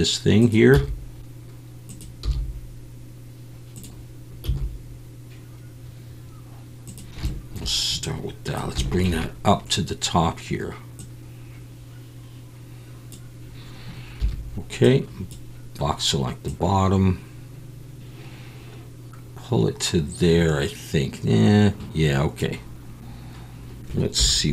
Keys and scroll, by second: 2.2 g, 4.4 s, 14.2 1, 24.2 z.